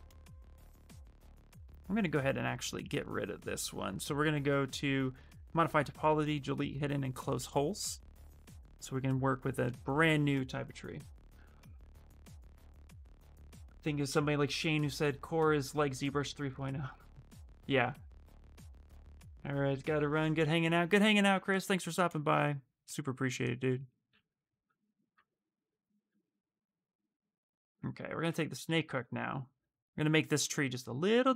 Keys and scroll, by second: 27.7-29.3 typing, 30.8 s.